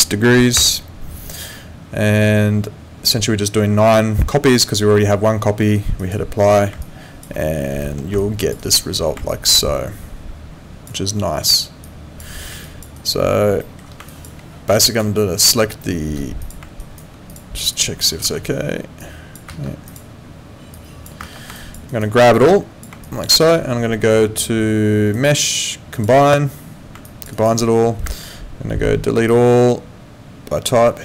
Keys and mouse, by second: 0.0 3, 0.6 6, 6.0 click, 6.8 alt+click, 7.4 alt+middle click, 8.2 alt+click, 8.6 alt+right click, 9.3 alt+click, 11.8 click, 12.6 alt+click, 13.0 alt+right click, 13.6 alt+middle click, 14.1 alt+click, 16.4 click, 16.8 alt+right click, 17.3 click, 18.2 w, 19.0 click, 19.5 ctrl+z, 19.9 click, 21.2 ctrl+z, 21.6 alt+click, 21.9 alt+right click, 22.3 click, 23.0 alt+click, 23.3 alt+right click, 25.1 click, 27.0 alt+click, 27.3 alt+right click, 28.0 space, 29.3 click.